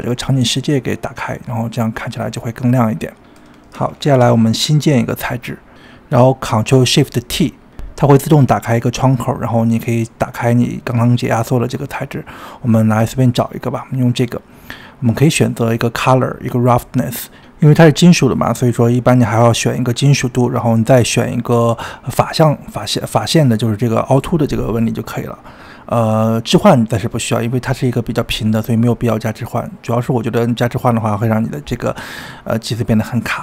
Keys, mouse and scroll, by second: 0.5-1.5 middle drag, 1.5 click, 3.6 click, 4.0 click, 4.3-5.1 scroll up 9, 5.1-6.5 shift+middle drag, 6.5 click, 8.1 ctrl+shift+t.